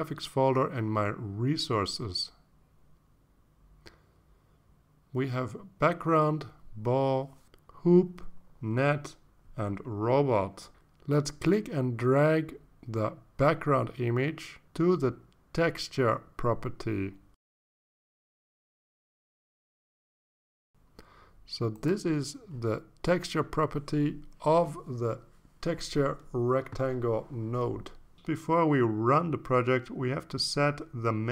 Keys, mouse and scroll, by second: 3.8 click, 6.4 click, 7.2 click, 7.7 click, 8.2 click, 8.7 click, 9.2 click, 10.6-11.8 drag, 14.7-17.3 drag, 23.3 ctrl+s.